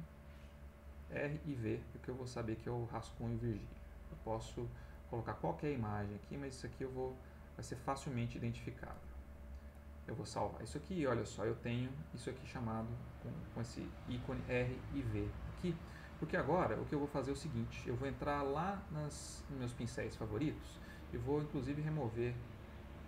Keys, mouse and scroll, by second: 5.6-7.2 drag, 9.7 click, 10.0-10.5 scroll up 1, 18.4-20.1 drag, 20.1-21.2 scroll up 1, 21.2-23.0 right drag.